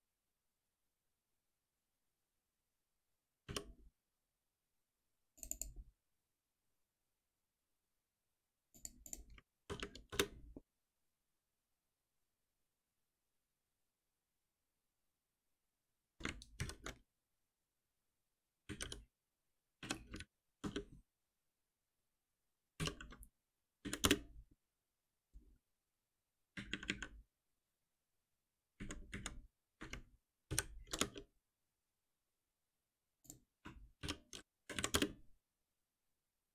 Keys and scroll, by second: 3.4 alt+F7, 9.6 alt+Return, 16.2 ctrl+alt+m, 22.8 F6, 23.8 Down, 26.5 ctrl+shift+Up, 30.5 ctrl+alt+n, 34.0 shift+F6, 34.7 Delete.